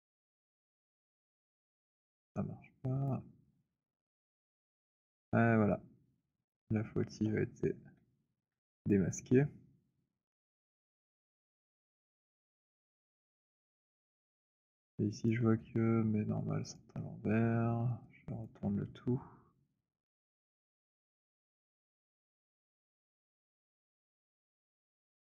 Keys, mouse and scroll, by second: 0.0-1.8 typing, 1.8 middle click, 3.1 click, 3.6-7.3 typing, 7.3 middle click, 8.4 w, 8.9 click, 11.1 click, 13.1 click, 15.3 click, 16.6 click, 21.0 right click, 22.2 click.